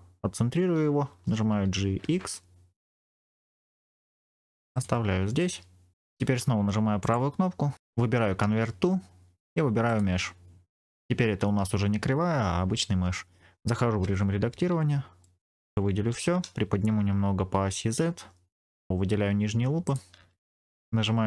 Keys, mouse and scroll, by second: 1.4 g, 1.7 x, 4.6 click, 5.3 middle click, 6.9-13.9 drag, 6.9 right click, 13.9 Tab, 14.5 scroll up 2, 15.1 middle click, 15.1 scroll up 1, 16.0 a, 17.4 g, 17.6 z, 18.9 alt+click, 19.7 alt+shift+click.